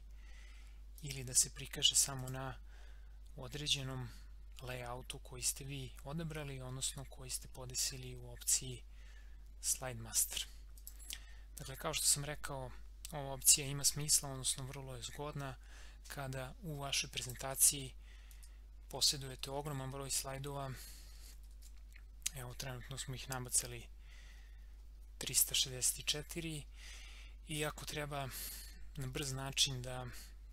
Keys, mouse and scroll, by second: 1.0 click, 10.7 click, 11.6 scroll down 1, 17.2 click, 17.5 ctrl+a, 18.3 ctrl+c, 18.9 ctrl+v, 23.2 scroll down 1, 24.8 scroll down 1, 26.2 scroll up 1, 29.3 scroll up 1.